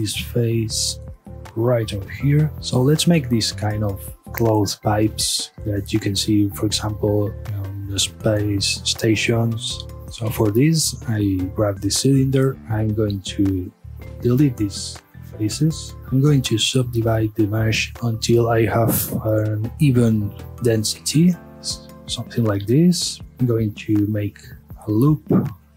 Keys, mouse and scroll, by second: 0.1 g, 1.6 click, 1.9 scroll down 1, 2.1-2.5 middle drag, 4.7-6.7 middle drag, 6.7 scroll up 1, 6.9-7.4 middle drag, 7.4-9.2 scroll down 1, 9.2-10.0 middle drag, 10.0 Tab, 10.1 scroll up 1, 10.3 Tab, 10.7-13.1 middle drag, 13.1 3, 13.3 click, 13.6-14.0 scroll down 1, 14.0-14.4 middle drag, 14.4-14.9 scroll up 1, 14.9 shift+click, 15.3 scroll down 1, 15.5 x, 16.4 ctrl+r, 21.4 right click, 21.7-22.7 middle drag, 22.7 a, 22.9 scroll down 1, 23.1-24.1 middle drag, 24.1 ctrl+r, 24.6 scroll down 1, 24.8 scroll up 1, 25.3-25.7 middle drag.